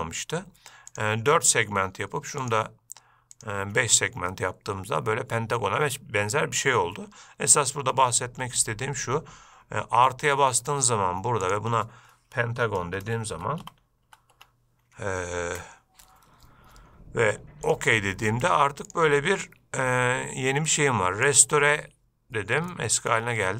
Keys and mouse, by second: 1.2 drag, 4.6-6.9 middle drag, 10.9-18.1 drag, 19.1-21.6 drag, 23.0-23.4 middle drag.